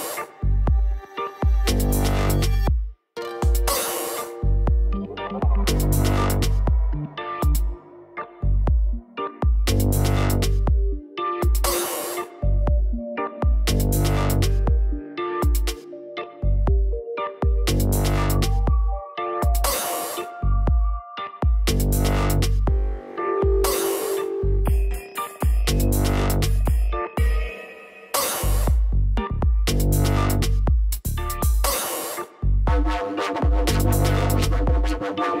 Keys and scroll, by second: 13.7 a, 14.4 b, 14.9 m, 15.9-17.2 typing, 18.8 s, 19.7 shift+2, 20.9-23.6 typing, 24.2 ctrl+Return.